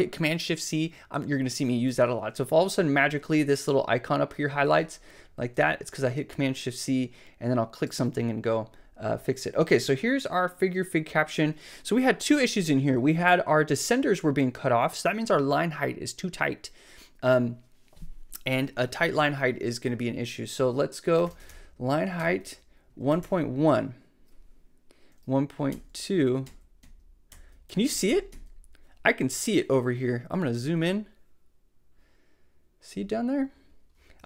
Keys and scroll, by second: 4.7 shift+super+c, 20.9-23.7 typing, 22.2 Tab, 25.7 alt+Up, 26.4 alt+Down, 27.3 alt+Up, 27.9 alt+Down.